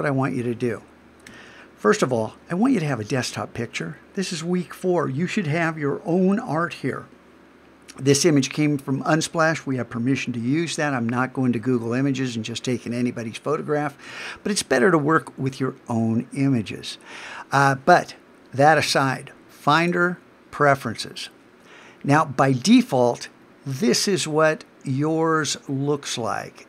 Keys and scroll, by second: 1.3 alt+super+h.